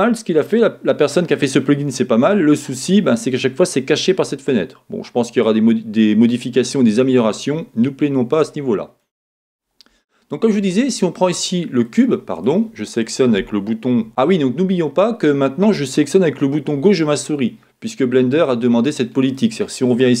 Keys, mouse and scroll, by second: 0.3 click, 7.0-10.8 middle drag, 10.8-11.9 right drag, 12.4 click, 18.1-20.2 middle drag.